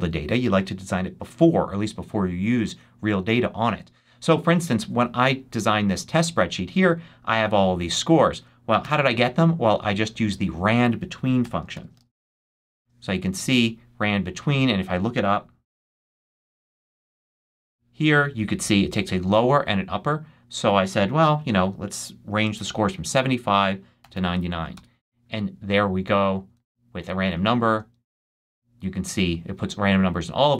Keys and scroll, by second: 8.7 shift+BackSpace, 9.4 BackSpace, 11.3 =, 11.6 shift+r, 12.3 shift+n, 15.6-16.8 typing, 21.9 7, 22.4 5, 23.9 9, 24.6 Return, 26.5 super+c, 27.2 shift+super+c, 28.0 shift+super+v, 28.7 super+v.